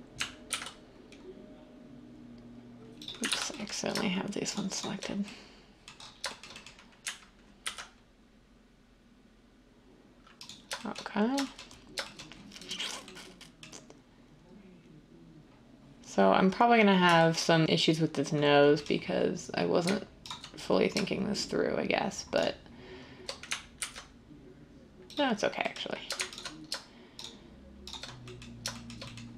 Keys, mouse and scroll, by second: 0.4 ctrl+b, 3.2 ctrl+z, 7.5 ctrl+b, 23.8 ctrl+b.